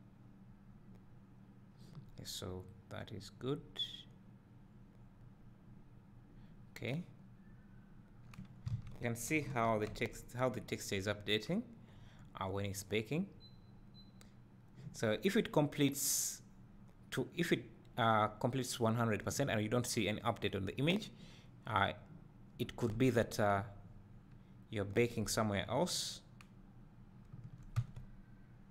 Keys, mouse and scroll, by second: 6.9-7.5 scroll down 2, 8.3 scroll up 1, 8.7 alt+a, 10.2 Tab, 11.3 scroll down 1, 12.4 scroll up 1, 23.4 Tab, 27.5-28.7 drag.